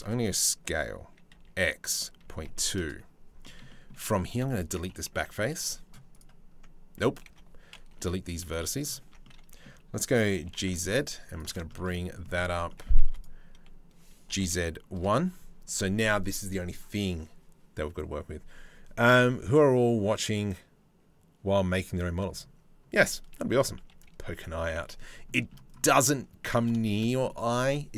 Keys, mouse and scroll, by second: 3.0 middle click, 3.3 middle click, 3.9 3, 4.1 click, 4.8 Delete, 6.8 ctrl+z, 7.5 Delete, 8.6 Tab, 8.8 click, 9.9 g, 11.3 shift+middle click, 11.5 middle click, 12.0 Tab, 12.3 middle click, 12.6 2, 12.7 click, 13.9 g, 23.4 KP_3, 24.9 middle click, 25.3 click, 26.4 shift+right click.